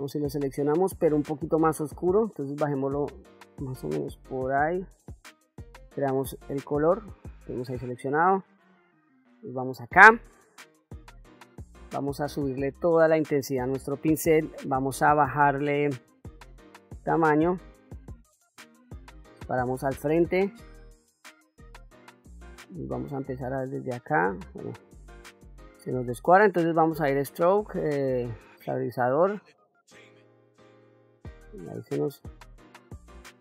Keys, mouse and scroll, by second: 1.0-5.0 drag, 5.9 click, 7.6 ctrl+middle click, 8.5 middle click, 9.6 middle click, 12.2 shift+f, 19.4 ctrl+middle click, 20.5 shift+middle click, 23.1-24.3 drag, 24.7 ctrl+z, 26.9-28.2 drag, 29.5-30.6 drag, 31.0 ctrl+z, 32.0-33.4 drag.